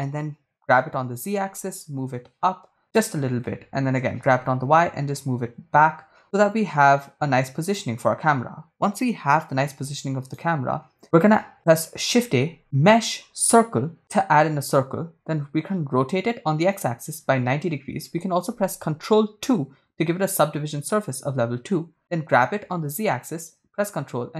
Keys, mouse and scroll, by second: 1.1 g, 1.5 z, 3.3 ctrl+click, 4.2 g, 4.4 y, 7.9 ctrl+click, 10.6 right click, 12.2 shift+a, 15.3 r, 17.1 x, 17.8 9, 17.8 0, 18.4 Return, 19.5 ctrl+2, 22.2 g, 23.1 z.